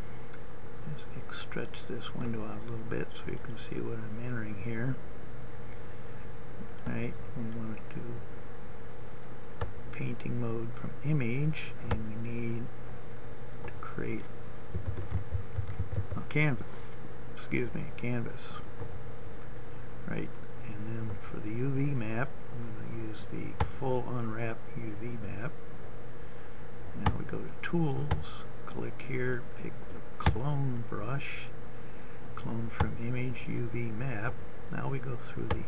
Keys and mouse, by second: 3.6-5.0 drag, 6.6-32.2 drag, 33.2-35.1 drag.